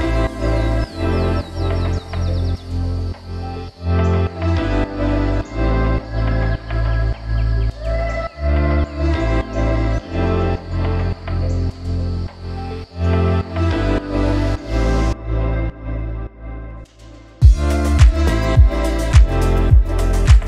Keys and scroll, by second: 14.5 a, 19.9 ctrl+z, 20.1 ctrl+z.